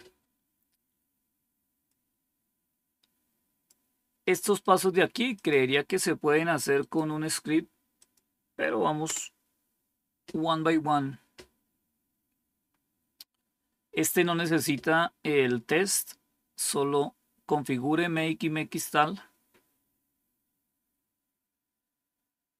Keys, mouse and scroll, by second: 1.8-3.6 drag, 4.6 right click, 5.3 click, 6.7 right click, 7.9 click, 9.0 Return, 11.8 scroll down 2.